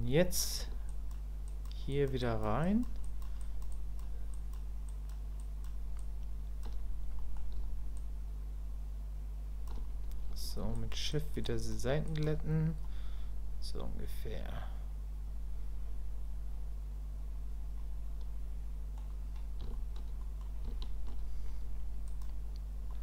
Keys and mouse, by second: 0.9 ctrl+click, 1.5 ctrl+click, 1.9 ctrl+click, 2.2 ctrl+click, 2.6 ctrl+click, 3.1 ctrl+click, 3.4 ctrl+click, 3.7 ctrl+click, 4.3 ctrl+click, 4.9 ctrl+click, 5.4 ctrl+click, 6.0 ctrl+click, 7.2 middle click, 8.0-9.7 ctrl+drag, 10.7 shift+click, 11.1 shift+click, 11.4 shift+click, 12.1 shift+click, 12.8-19.0 middle drag, 19.7 shift+click, 20.2 middle click, 20.8 shift+click, 22.1 click, 22.9 middle click.